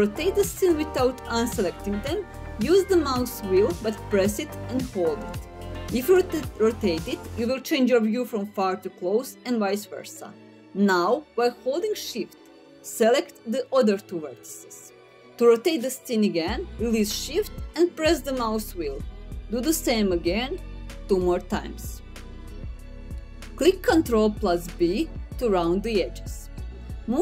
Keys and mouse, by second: 2.3-5.9 middle drag, 10.4 middle click, 11.7 shift+click, 12.3 middle click, 13.7 shift+click, 16.5 middle click, 17.6 shift+click, 17.9 middle click, 18.8 shift+click, 23.7 ctrl+b.